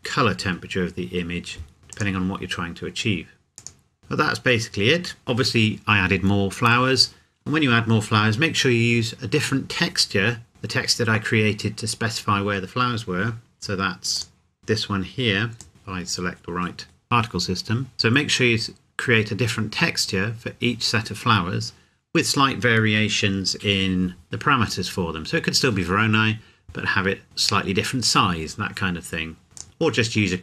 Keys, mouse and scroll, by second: 1.9 click, 4.1 scroll up 1, 4.5 scroll down 1, 14.1 click, 14.6-15.6 scroll down 1, 15.6 click, 16.1 scroll up 1, 17.0-17.4 scroll down 1, 24.2 click, 29.6 click.